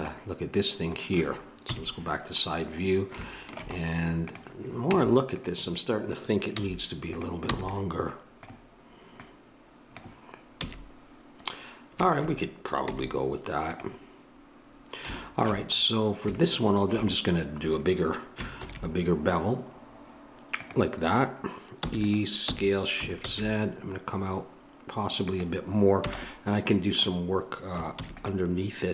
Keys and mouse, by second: 1.6 KP_3, 4.3 click, 4.8 Tab, 5.4-6.5 drag, 6.5 z, 7.5 b, 9.2 click, 10.6 a, 18.6 ctrl+b, 21.9 e, 22.4 s, 26.0 a, 27.9 ctrl+r.